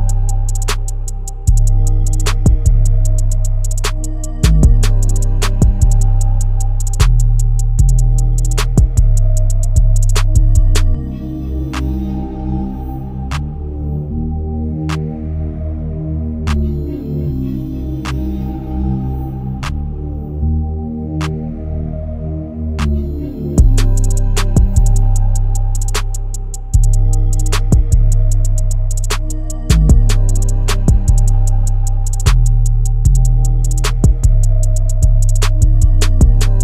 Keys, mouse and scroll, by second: 1.2 click, 1.4-2.6 middle drag, 2.6 e, 4.7 e, 6.2 s, 8.7-9.8 middle drag, 9.8 scroll up 4, 10.7 Tab, 11.5 middle click, 12.4 click, 12.8 middle click, 13.5-14.6 right drag, 14.6-15.6 shift+middle drag, 15.6 click, 16.9-18.4 middle drag, 18.4 scroll up 2, 18.6 shift+middle click, 19.4 s, 21.5 scroll down 1, 21.8-23.0 middle drag, 23.0 e, 25.4-26.9 middle drag, 26.9 ctrl+r, 29.1 click, 29.7 click, 30.1-31.5 middle drag, 31.5 e, 34.3 s.